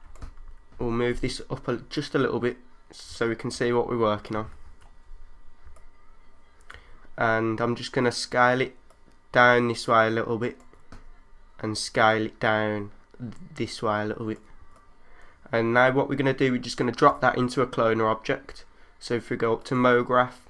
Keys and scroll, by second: 0.9 super+z, 3.5 3, 4.6 super+z, 14.6 3.